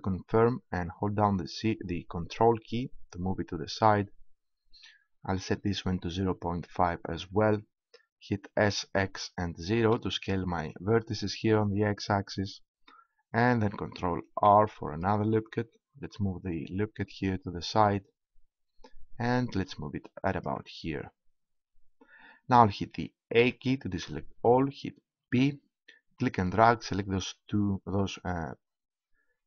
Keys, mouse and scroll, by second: 7.1-8.5 drag, 8.5 s, 15.5 ctrl+r, 20.9-22.2 drag, 23.4 a, 25.2 b.